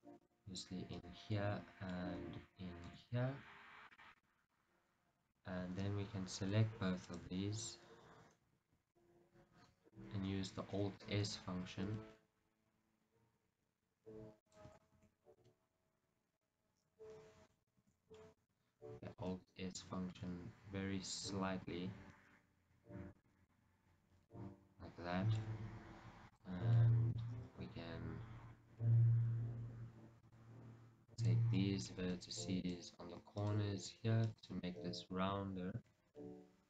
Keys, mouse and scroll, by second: 1.1 right click, 1.5 middle click, 2.9 ctrl+r, 4.4 right click, 4.6 middle click, 7.2 alt+shift+click, 8.6 KP_1, 12.0 alt+s, 14.6 click, 15.0 shift+a, 15.2 z, 15.4 scroll, 15.6-17.9 middle drag, 17.9 ctrl+z, 18.3-19.3 middle drag, 19.3 alt+s, 23.6-25.6 middle drag, 25.6 scroll, 26.4 click, 27.0-30.4 middle drag, 30.4 click, 31.2 click, 31.6-32.7 middle drag, 32.7-34.7 shift+drag, 34.7-35.9 middle drag, 35.9 shift+click.